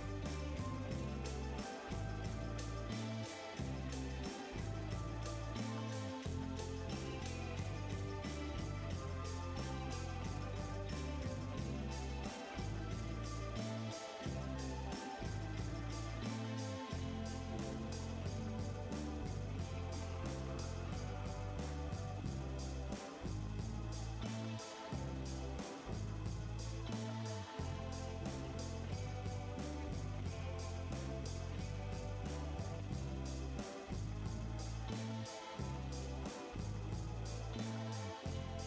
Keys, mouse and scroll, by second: 23.6-24.7 middle drag.